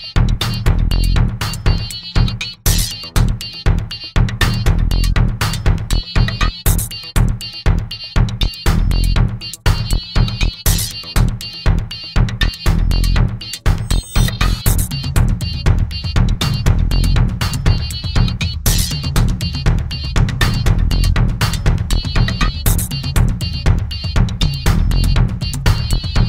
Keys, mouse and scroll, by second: 1.1 click, 3.4 click, 6.3 click, 7.1 click, 8.5 click, 9.7 click, 11.7 click, 12.9 click, 14.0 click, 15.7 click, 23.2 click, 26.1 click.